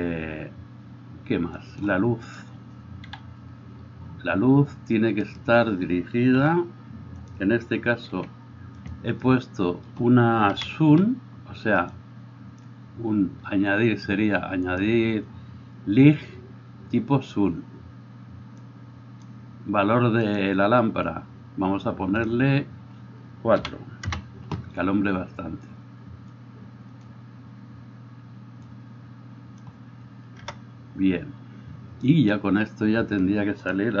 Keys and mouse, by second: 0.0-1.6 middle drag, 1.6 click, 2.4-22.2 middle drag, 3.1 KP_7, 5.3 click, 6.4 r, 8.1 g, 10.5 KP_2, 12.0-20.4 drag, 22.2-34.0 drag, 30.4 KP_0.